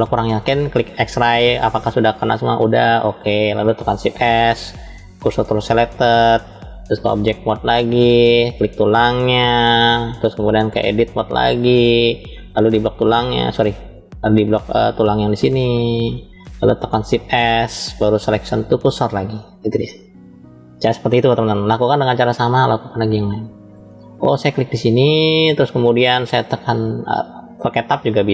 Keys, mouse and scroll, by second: 1.0 click, 2.4 click, 3.9 shift+s, 6.9-7.7 drag, 8.3 click, 10.4-11.2 drag, 12.5 click, 13.8 ctrl+z, 14.3 click, 15.0 click, 16.9 shift+s, 22.3 click, 22.7-23.3 drag, 24.2 click, 27.7 Tab.